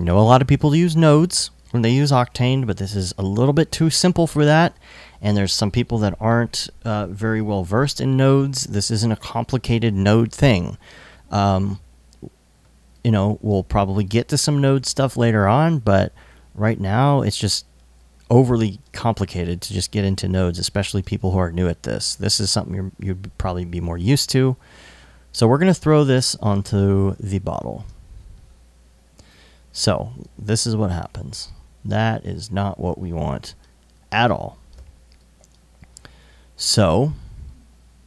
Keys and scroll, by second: 13.4 alt+i, 14.3 i, 20.2 alt+i, 35.5 |.